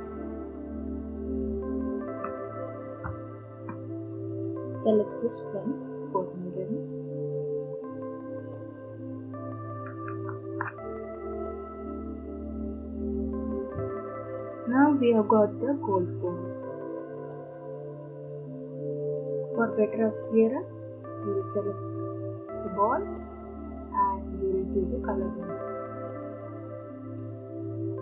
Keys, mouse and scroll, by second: 2.8 ctrl+d, 5.4 click, 14.4 click, 14.4 middle click, 21.2 click, 24.6 click, 27.5 click.